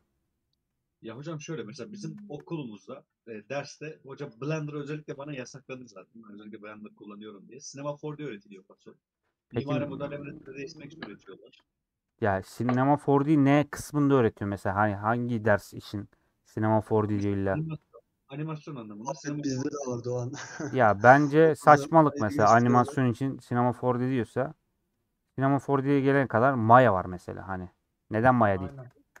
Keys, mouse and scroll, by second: 0.1-3.1 middle drag, 3.1 scroll up 1, 3.5 2, 3.7-7.5 alt+drag, 7.5 middle click, 8.1 1, 8.5-10.1 middle drag, 10.1 a, 11.0 scroll down 1, 11.3-12.7 shift+middle drag, 19.2-21.1 middle drag, 21.1 scroll up 1, 21.2 middle click, 21.6-22.1 scroll up 2, 22.1-25.3 middle drag, 25.3 1, 26.9 scroll down 1, 27.1-29.2 middle drag.